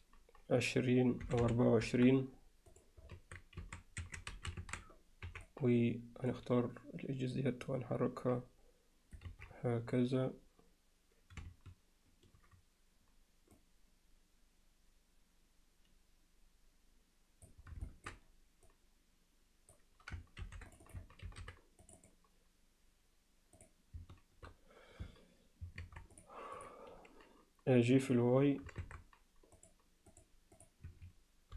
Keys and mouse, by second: 3.2 Tab, 3.6 a, 4.0 1, 4.3 a, 5.3 b, 7.7-9.2 drag, 9.3 ctrl+z, 13.6-17.5 drag, 17.9 alt+shift+middle click, 18.7-19.8 drag, 20.4 ctrl+r, 20.9 click, 21.3 ctrl+r, 22.0 click, 25.8 shift+Tab, 26.2 click, 28.8 shift+Tab, 29.6-30.8 drag, 30.9 Escape.